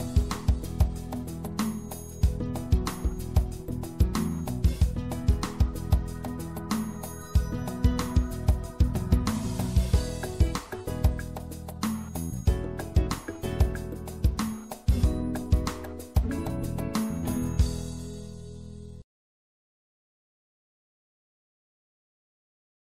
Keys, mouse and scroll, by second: 0.4 middle click, 2.4 right click, 3.1-6.0 drag, 3.1 e, 7.2 right click, 8.1 e, 9.1 click, 10.4 click, 10.4 middle click, 10.6 click, 10.7 middle click, 10.8 click, 11.3 right click, 12.2 e, 18.5 e, 19.5-20.5 drag, 21.3 right click.